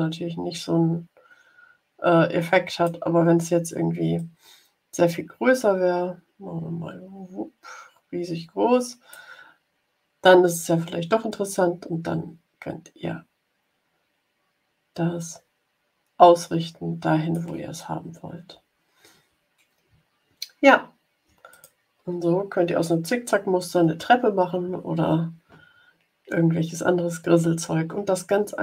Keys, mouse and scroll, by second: 4.1-9.2 drag, 11.2-17.4 drag, 19.9-20.8 ctrl+scroll down 4, 21.4 click.